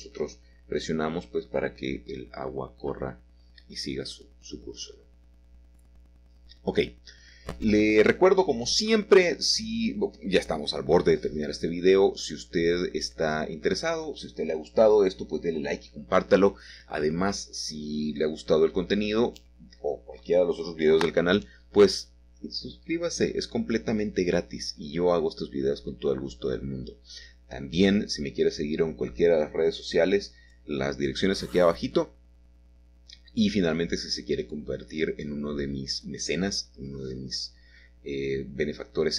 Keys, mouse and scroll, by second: 1.3-4.0 middle drag, 4.3-5.8 drag, 6.5-7.6 drag, 7.7 g, 9.9-12.2 drag, 12.4-12.9 scroll up 1, 12.9-13.7 typing, 15.2-16.8 drag, 16.8 Escape, 17.2 s, 17.6 y, 19.4 click, 21.4 click, 27.5 click, 28.1-32.6 middle drag, 37.1-39.1 shift+middle drag.